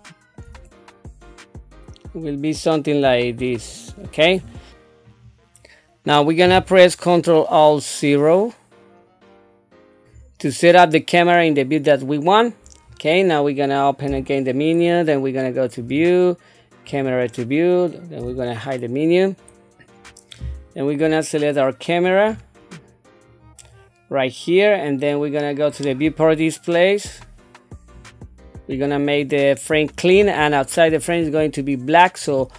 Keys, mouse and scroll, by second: 0.7 middle click, 14.1 n, 15.7 click, 16.9 click, 18.2 n, 22.2-23.1 scroll, 23.3 click, 25.7 click, 27.2 click.